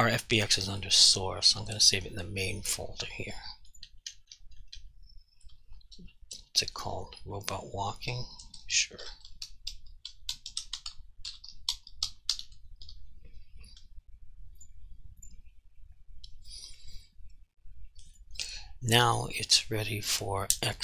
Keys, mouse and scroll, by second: 3.8 click, 3.9 BackSpace, 5.5 BackSpace, 9.1-12.9 typing, 14.6 click, 18.1 click.